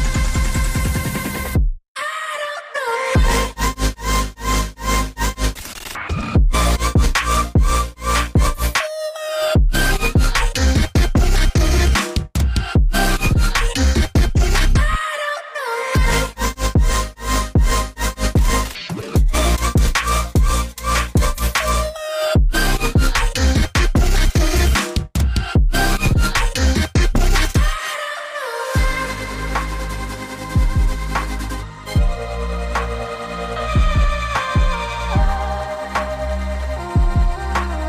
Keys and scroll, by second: 2.2-4.0 typing, 3.6 ctrl+3, 5.2 v, 5.5 ctrl+alt+3, 6.4 g, 10.0 v, 16.0 Delete, 28.4 ctrl+z, 29.1 ctrl+z, 30.8 ctrl+shift+], 32.8 ctrl+z, 34.6 ctrl+shift+].